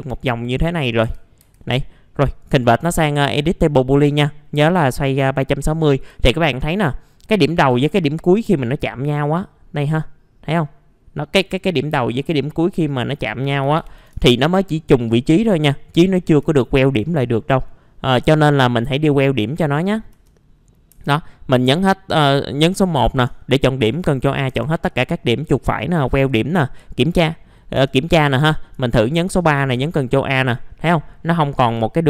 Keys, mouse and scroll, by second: 0.6-1.0 scroll down 1, 1.0 F4, 1.6 middle click, 1.8-2.3 scroll down 1, 2.3 right click, 5.8 middle click, 6.2 alt+middle click, 7.2 alt+middle click, 7.8-8.2 scroll up 1, 9.2-12.1 drag, 13.6 KP_3, 13.8 KP_6, 14.0 KP_0, 15.1-16.2 scroll up 1, 16.3 F4, 16.8 right click, 18.4 click, 19.4 middle click, 19.9 scroll up 1, 20.7 scroll up 1, 20.9 F3, 21.5 scroll down 1, 23.9 ctrl+a, 24.2 scroll up 1, 24.5 F3, 24.9 right click, 25.9 click, 26.5 middle click, 27.1 middle click, 27.8 middle click, 29.6 ctrl+a, 30.1-30.7 scroll up 1, 30.7 middle click, 31.3-31.6 scroll down 1, 31.6 F4.